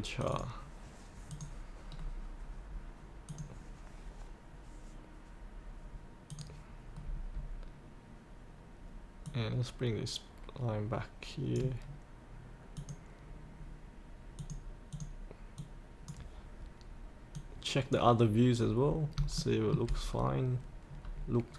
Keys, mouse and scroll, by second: 1.9-3.3 scroll down 1, 3.3 click, 6.9-7.7 scroll down 1, 8.0-9.3 scroll down 1, 9.3-12.1 drag, 18.8 scroll up 1, 19.3 shift+middle click, 20.1-21.0 scroll up 1.